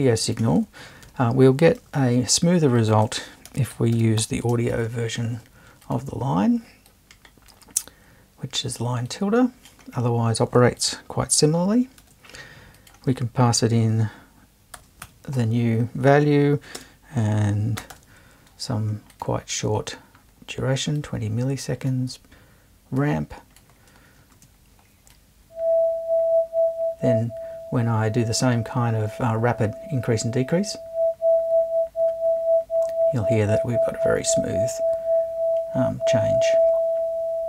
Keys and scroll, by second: 1.1 BackSpace, 1.9 super+BackSpace, 2.0 super+i, 3.2-4.7 typing, 12.0 super+2, 14.8-18.4 typing.